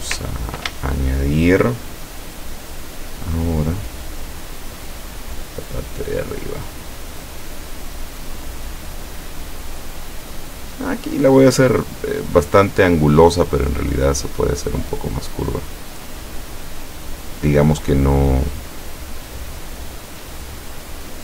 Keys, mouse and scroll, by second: 4.9 shift+click, 8.2 shift+click, 9.1 shift+click, 10.6 shift+click, 12.6 shift+click, 13.7 shift+click, 14.9 shift+click, 17.4 shift+click, 19.4 shift+click.